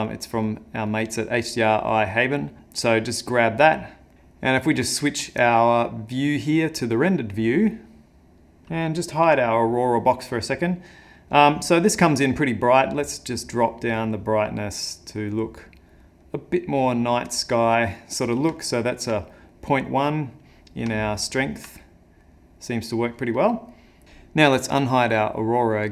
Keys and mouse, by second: 3.4 click, 4.1 click, 8.2 click, 9.2 h, 12.7 click, 16.6 click, 18.3 middle click, 18.6 ctrl+middle click, 19.2 middle click, 21.0 ctrl+middle click, 21.8 middle click, 25.2 click.